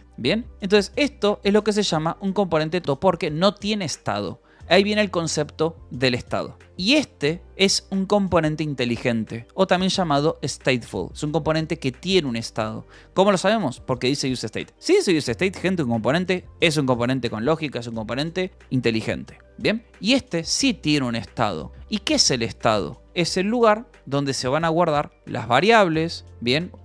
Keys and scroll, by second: 0.0-0.4 typing, 0.4 Escape, 1.5 k, 2.3 k, 2.7 j, 3.4 j, 3.8 Escape, 6.9 k, 7.5 k, 14.2 shift+v, 18.5 Escape, 20.1 shift+j, 20.7 shift+j, 21.1 shift+k, 21.5 Escape, 22.1 k, 22.9 shift+v, 23.0 Escape, 24.5 e, 25.7 v, 26.2 b, 26.7 Escape.